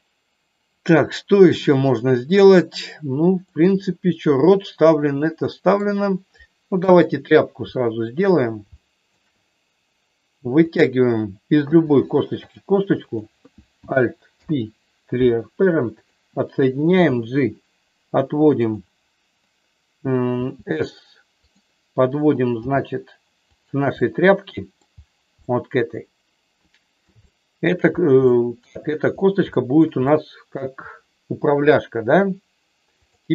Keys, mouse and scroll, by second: 3.4-5.8 middle drag, 6.7 KP_3, 7.7 shift+middle click, 8.7 shift+middle click, 10.7 click, 11.5 e, 13.1 click, 14.3 alt+p, 16.9 g, 20.3 s, 21.4 click, 22.6 g, 23.4 click, 23.9 middle click, 25.3-27.0 middle drag, 27.2 shift+middle click, 28.3 shift+middle click, 29.4 shift+middle click, 29.9 middle click.